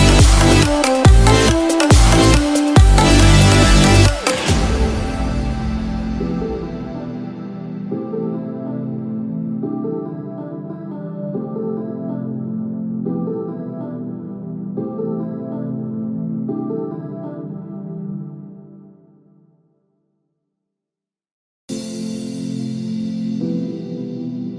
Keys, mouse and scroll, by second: 2.8 alt+click, 4.3 g, 10.1 Tab, 10.4 click, 10.9 Tab, 13.1 ctrl+r, 14.4 ctrl+r, 17.5 alt+click, 19.3 g, 23.9 alt+click.